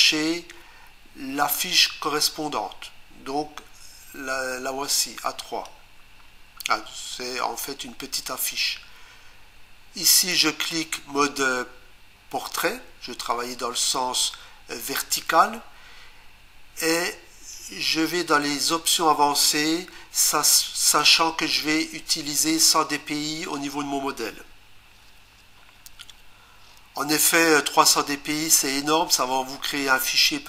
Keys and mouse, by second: 10.4 click, 18.1 click, 22.6 click, 25.0 1, 26.1 typing.